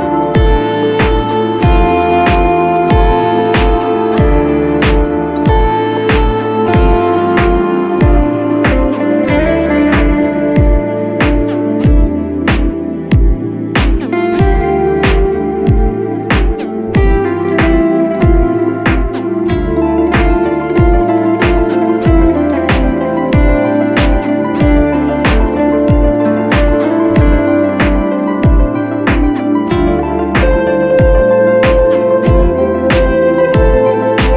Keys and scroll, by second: 2.8 g, 3.1 x, 4.2 ctrl+d, 7.7 ctrl+t, 11.2 Return, 14.2 space, 17.2 1, 18.0 3, 19.2 2, 27.0 ctrl+u, 29.2 ctrl+z, 31.2 ctrl+t.